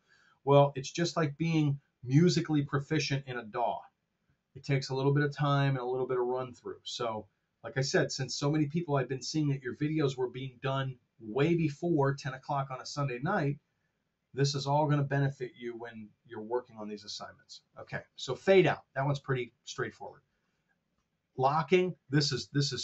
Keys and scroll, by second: 18.3 super+Tab.